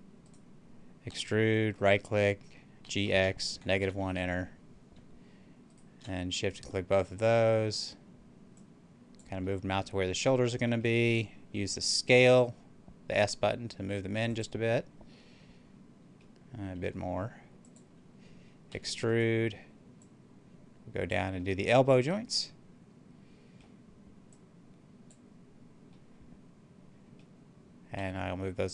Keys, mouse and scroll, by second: 0.2 right click, 1.0 e, 1.6 right click, 2.7-3.7 typing, 3.9 Return, 5.6 shift+right click, 7.1-9.4 drag, 9.4-10.7 middle drag, 10.7 scroll down 1, 12.0 s, 14.1 click, 15.1-16.7 middle drag, 16.7 s, 17.5 click, 18.6 e, 18.9 right click, 19.9-21.3 drag, 21.2-24.3 middle drag, 24.3-25.8 drag, 25.8-27.8 middle drag, 27.8 s.